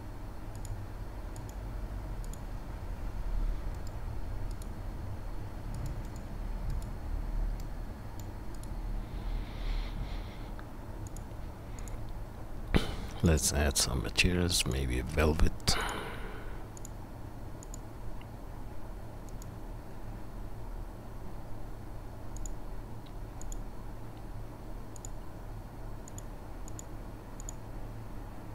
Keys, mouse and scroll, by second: 3.7-5.8 middle drag, 3.7-11.7 right drag, 8.5 click, 8.5 middle click, 11.0 click, 11.0 middle click, 11.7 click, 15.9-19.3 right drag, 19.3 middle click, 19.4 click, 19.4-23.4 right drag, 24.3-25.0 middle drag, 25.1 right click, 25.2 click, 25.3-26.2 right drag, 26.2-28.5 middle drag, 26.3-26.9 drag, 26.3-26.9 right drag.